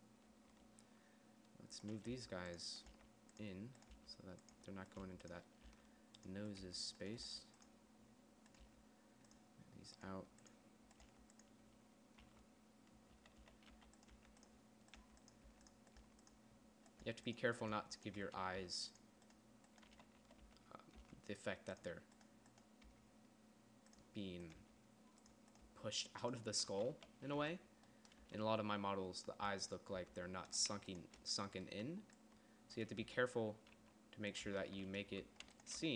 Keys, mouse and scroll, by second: 2.6 g, 3.4 g, 4.4 g, 5.5 g, 6.1 g, 7.1 g, 7.7 g, 9.1 g, 10.6 g, 11.5 g, 12.7-16.4 typing, 17.6 g, 18.1 g, 18.7 z, 19.0 g, 20.4 z, 20.7 z, 20.9 g, 21.4 g, 23.4 g, 25.1 g, 26.1 g, 27.1 z, 27.4 z, 27.9 Tab, 28.6 Tab, 30.4 Tab, 33.4 r, 34.9 Tab, 35.5 Tab.